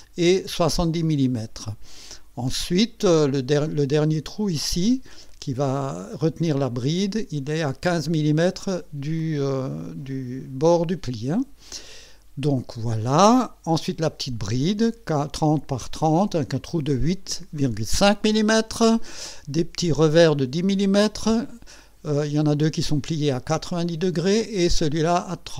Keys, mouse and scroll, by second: 6.4 click, 13.0 click, 14.4 click.